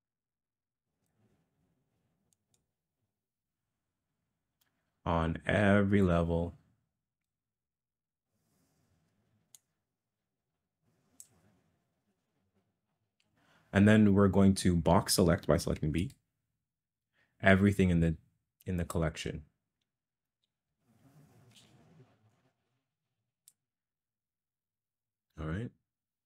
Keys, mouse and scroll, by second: 2.4 click, 6.2-7.2 drag, 9.7-11.2 drag, 21.5 b.